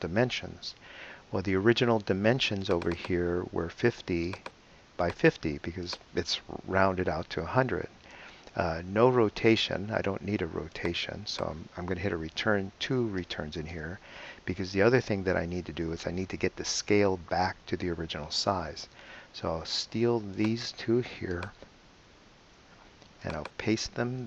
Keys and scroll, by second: 7.2 BackSpace, 13.2 Return, 22.4 super+c.